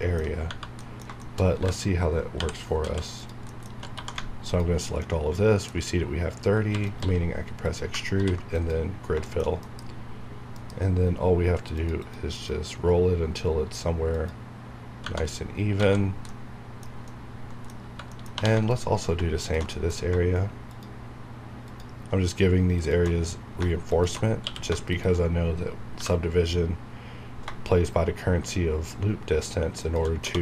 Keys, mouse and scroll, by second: 0.3 alt+scroll up 2, 0.5 Tab, 0.5 Right, 0.8 middle click, 1.6-4.0 typing, 3.2 click, 3.5 middle click, 4.4 alt+click, 5.0-6.7 middle drag, 6.6 e, 6.9 right click, 7.0 s, 7.6 click, 8.1 ctrl+f, 8.5 click, 9.3 shift+middle click, 9.6 F9, 11.7 click, 12.0 click, 12.3 click, 15.3 scroll down 1, 15.8 alt+a, 16.0 alt+scroll down 1, 16.3 middle click, 16.9 scroll up 1, 17.1 middle click, 17.8 scroll up 1, 17.9 Tab, 18.1 middle click, 18.3 2, 18.6 click, 19.7 shift+middle click, 20.7 alt+shift+click, 23.2 shift+scroll up 2, 23.9 alt+shift+click, 24.4 q, 24.9 shift+click, 26.0 b, 29.8 shift+click.